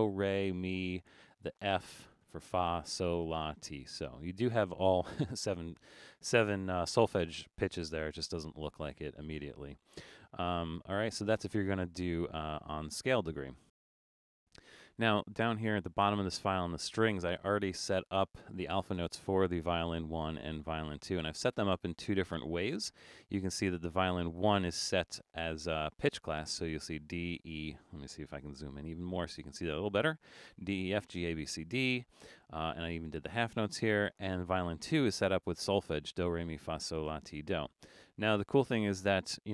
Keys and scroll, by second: 28.4 super+=.